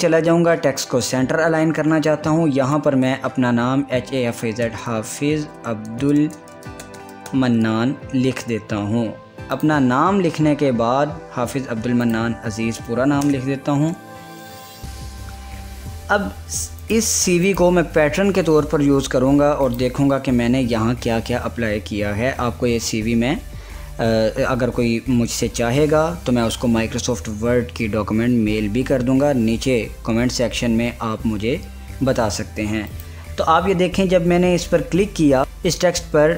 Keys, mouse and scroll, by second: 2.5 ctrl+e, 2.8-7.8 typing, 9.6 click, 12.2 click, 13.3-13.7 typing, 16.9 click, 17.7 click, 19.8 click, 33.0 click.